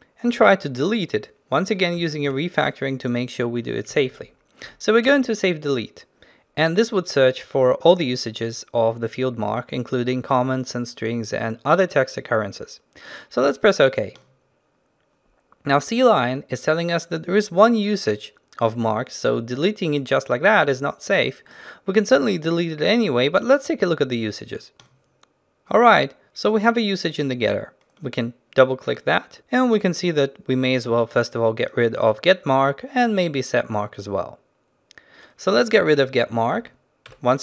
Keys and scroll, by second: 0.9 ctrl+b, 2.3 ctrl+alt+shift+t, 37.2 ctrl+alt+shift+t.